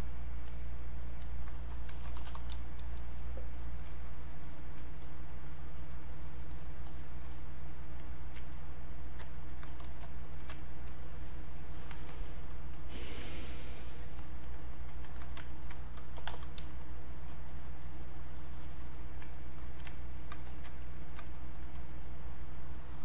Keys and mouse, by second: 1.7-2.9 typing, 3.1 alt+click, 4.5 alt+click, 5.7 alt+click, 8.5 click, 9.4 ctrl+right click, 9.6 click, 10.5 ctrl+right click, 11.3 click, 12.3 click, 12.9 alt+click, 13.4 ctrl+right click, 14.2 alt+click, 14.8 alt+click, 15.5 ctrl+alt+right click, 16.2 ctrl+b, 16.6 ctrl+space, 17.1 ctrl+click, 17.1 ctrl+space, 17.5-19.6 ctrl+drag, 19.6 alt+click, 20.1 ctrl+right click, 20.5 ctrl+alt+click, 20.8 ctrl+right click, 21.6 alt+click, 22.9-23.0 typing.